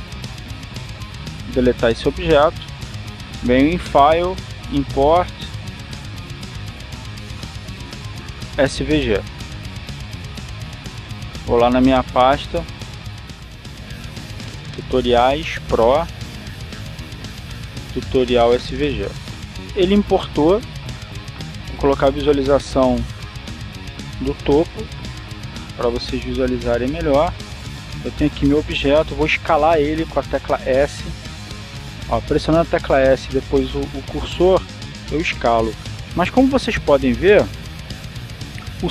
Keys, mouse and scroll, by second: 0.7 right click, 1.9 Delete, 2.7 click, 4.4 click, 15.7 click, 16.5 click, 17.7 click, 18.8 click, 20.0 click, 23.1 click, 26.8 click, 27.9-29.3 scroll up 1, 29.3 right click, 30.8 s, 31.9 click, 32.3-33.4 scroll down 1, 33.4 scroll down 1, 33.8 s, 36.3 click, 38.7 g.